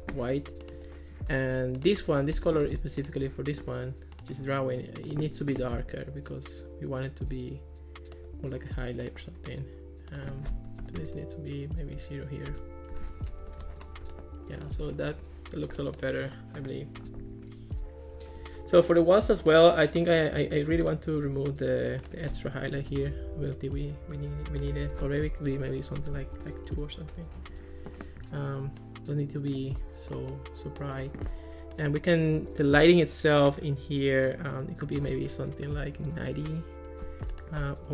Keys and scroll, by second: 2.4 Escape, 10.8 0, 12.5 Return, 13.3 Escape, 22.7 0, 22.8 Return, 25.2 2, 25.5 Return, 36.0 9, 36.4 Return, 37.8-37.9 typing.